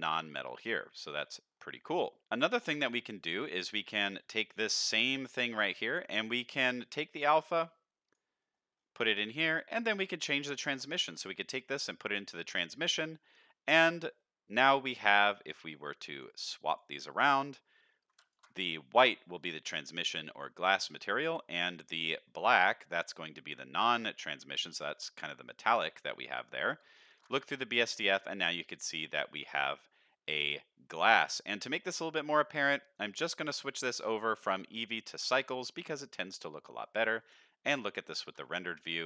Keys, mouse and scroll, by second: 0.9-1.5 scroll down 2, 1.3 middle click, 2.1 middle click, 2.2 ctrl+s, 2.2 click, 2.7 click, 3.3 click, 4.8 shift+d, 6.0 middle click, 6.2 scroll down 1, 7.1-8.2 drag, 8.4 middle click, 8.7-9.1 scroll up 2, 9.1 middle click, 9.7-11.9 drag, 13.8 middle click, 14.5 middle click, 15.2 drag, 15.9 drag, 16.5 drag, 17.1 drag, 18.2 ctrl+shift+click, 23.6 middle click, 26.3 middle click, 27.1 ctrl+shift+click, 28.1-28.5 middle drag, 28.7 middle drag, 29.1 middle drag, 29.6 middle click, 29.9 middle click, 33.1 click, 33.6-35.2 drag, 36.2 middle click, 36.7 z, 38.3 ctrl+s, 38.6 shift+middle click.